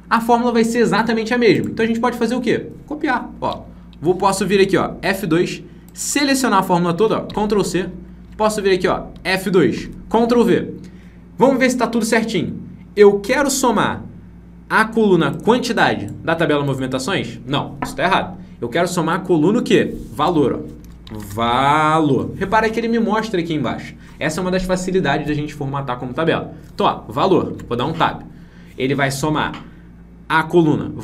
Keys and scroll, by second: 4.6 F2, 7.2 ctrl+c, 8.7 F2, 9.6 ctrl+v.